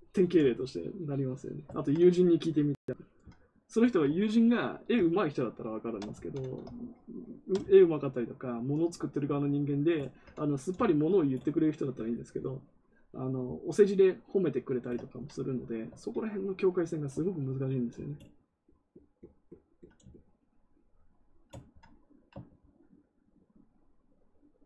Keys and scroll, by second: 6.1 ctrl+z.